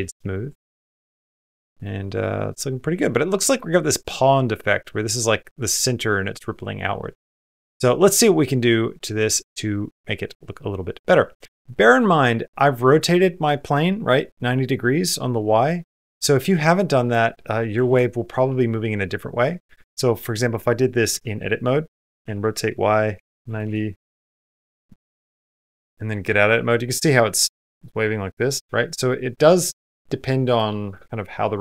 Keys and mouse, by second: 0.3-1.7 middle drag, 0.3 space, 2.0 middle click, 7.1 space, 11.4 middle click, 12.0 middle click, 15.1 middle click, 15.8 middle click, 16.8 click, 18.5 middle click, 19.2 middle click, 19.8 Tab, 20.3 middle click, 20.9 a, 24.5 r, 25.1 middle click, 25.5 Tab, 26.3 middle click, 28.9 middle click.